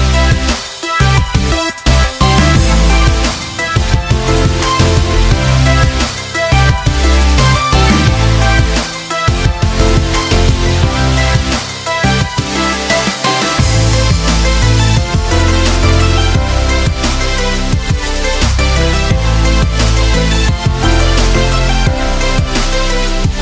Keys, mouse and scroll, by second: 8.2-14.7 drag, 16.7-23.4 drag.